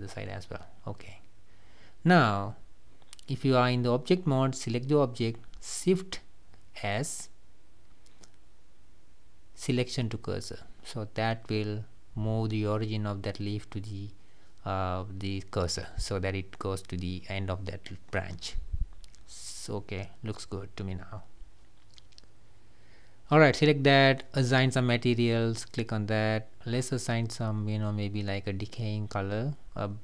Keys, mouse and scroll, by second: 0.5 g, 3.2 click, 3.5 click, 4.6-5.7 middle drag, 5.7 click, 8.2 shift+s, 8.9 shift+s, 11.9 click, 12.3-13.3 middle drag, 13.3 click, 13.7-14.3 middle drag, 14.3-14.7 scroll down 2, 14.7 middle drag, 14.9-15.3 scroll up 1, 15.3 click, 17.3-18.9 drag, 19.2-20.1 middle drag, 20.1 scroll down 2, 20.4-22.0 middle drag, 22.0 scroll down 2, 22.3-24.1 middle drag, 24.1-24.6 scroll up 1, 24.6 click, 26.5 click, 27.5-28.5 drag.